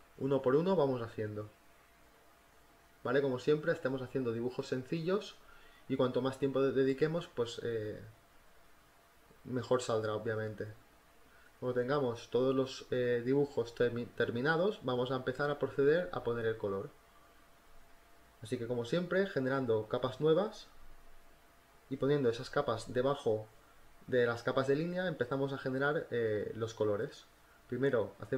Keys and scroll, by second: 3.4 ctrl+z, 7.1 space, 7.6 ctrl+z, 10.7 z, 12.0 b, 12.3 space, 13.2 b, 13.5 ], 18.4 BackSpace, 22.9 space, 26.2-28.3 typing.